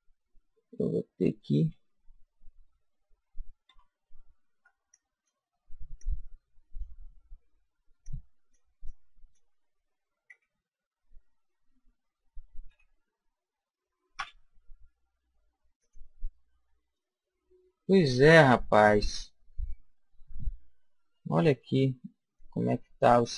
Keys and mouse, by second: 0.1-2.7 middle drag, 3.7 a, 4.5 b, 4.9 click, 6.0 click, 8.0 click, 10.3 g, 14.2 a, 15.8-17.0 drag, 17.0-18.7 middle drag, 21.8-23.2 middle drag, 23.2 click, 23.2-23.3 right drag.